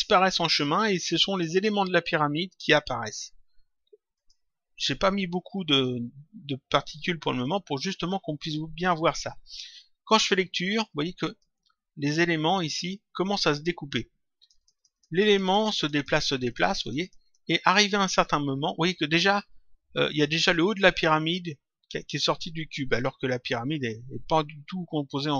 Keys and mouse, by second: 4.1 click, 10.0 click, 11.2 click, 14.3 click.